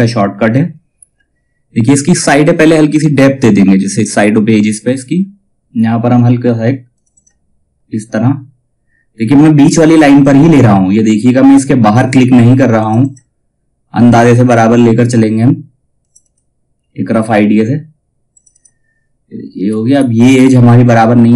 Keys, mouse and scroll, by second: 6.4 click, 12.3 click, 15.5 click, 19.2-19.5 scroll up 1, 20.9-21.3 drag.